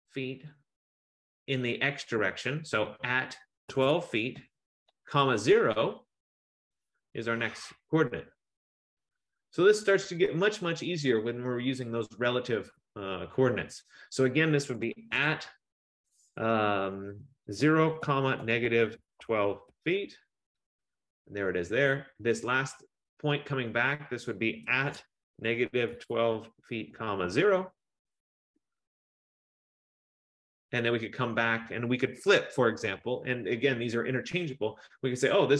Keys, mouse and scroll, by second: 3.6-5.2 typing, 7.3 Return, 11.6 F15, 15.2 typing, 17.4-20.1 typing, 24.6-27.8 typing, 28.5 Return, 33.3 Return.